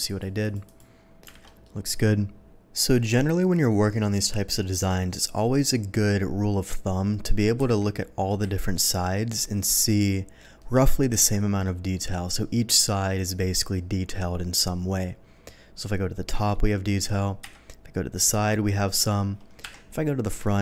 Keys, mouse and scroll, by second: 0.0 shift+click, 0.4 click, 0.6 click, 1.4 alt+a, 1.4 middle click, 4.0-4.5 middle drag, 4.7-7.5 scroll up 1, 7.7 KP_1, 8.4 KP_3, 11.1 KP_7, 15.3 middle click, 17.4 KP_3, 19.6 KP_1.